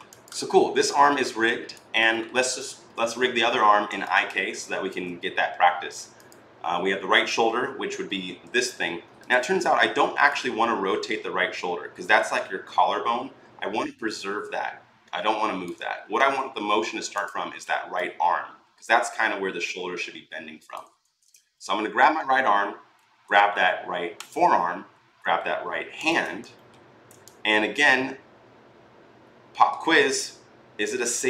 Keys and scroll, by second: 8.2 r, 16.0 ctrl+z, 20.8 ctrl+z.